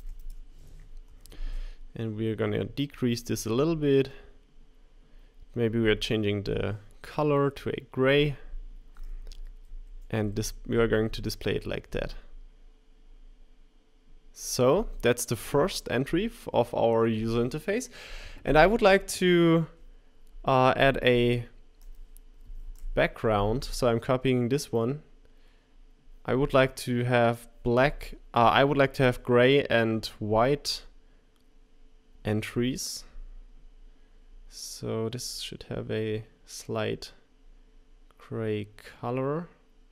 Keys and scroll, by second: 0.0-1.6 typing, 22.6 super+c.